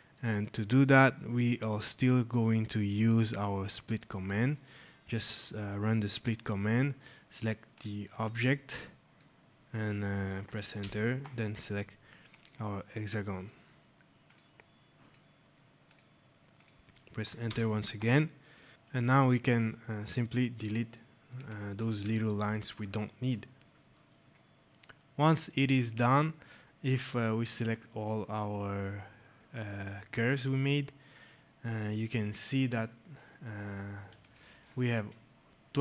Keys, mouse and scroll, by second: 0.0 click, 2.2-2.6 scroll, 3.8 click, 7.6 click, 10.7 Return, 12.2 click, 17.3 shift+Return, 18.6 alt+scroll, 21.2 Delete, 21.7 click, 22.0 Delete, 22.2 scroll, 22.9 right click, 23.0 middle click, 23.3 scroll, 24.6 click, 26.7 click.